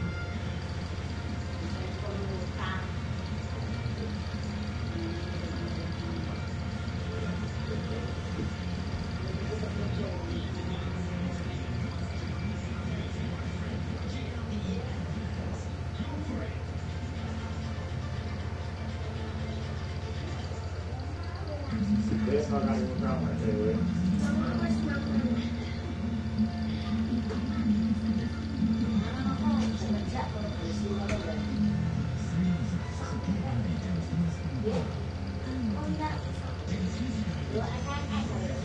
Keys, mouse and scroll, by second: 0.1 click, 1.9 click, 2.5 click, 3.5-5.8 drag, 6.9 click, 8.0 click, 10.9-12.4 drag, 14.3 click, 17.3-20.7 drag, 23.2 click, 25.2 click, 29.4 click, 30.7 6, 31.2 Return, 32.4 click, 36.9-38.4 drag.